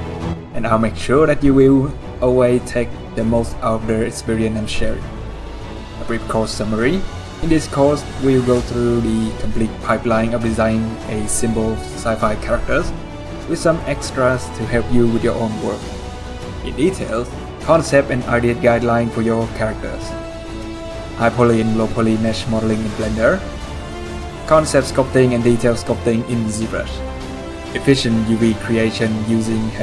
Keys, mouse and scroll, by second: 5.6 middle click, 10.8-11.1 scroll, 11.1 middle click, 11.2-12.6 typing, 14.4-16.1 typing, 15.8 scroll, 16.2 middle click, 16.7 middle click, 20.6-21.4 typing, 20.7 middle click, 21.5 right click, 21.8 alt+a, 21.9 Tab, 22.1 middle click, 22.2-22.8 scroll down 2, 22.3 middle click, 22.8 scroll down 2, 22.9 middle click.